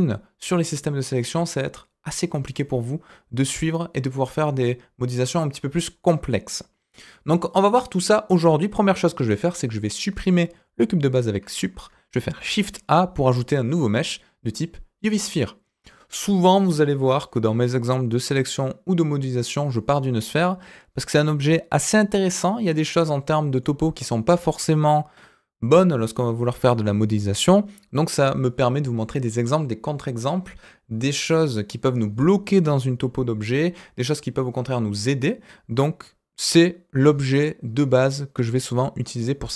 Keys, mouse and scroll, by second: 10.7 Delete, 12.3 shift+a, 15.7-17.8 scroll up 2, 18.3 middle click, 23.6 middle click, 27.4-29.0 middle drag.